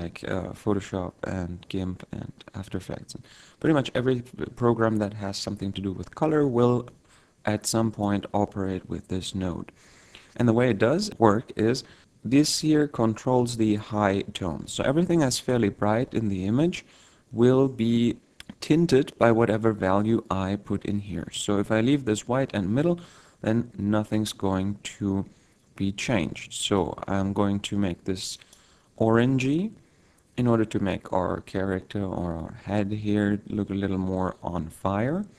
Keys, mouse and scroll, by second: 7.1 click, 7.2 click, 26.9 click, 28.8 click.